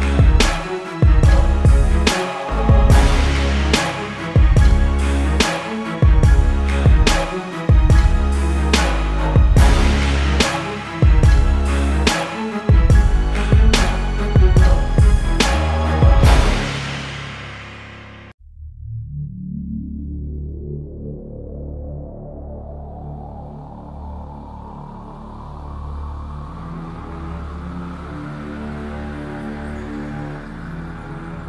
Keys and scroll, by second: 12.0 z, 12.5 z.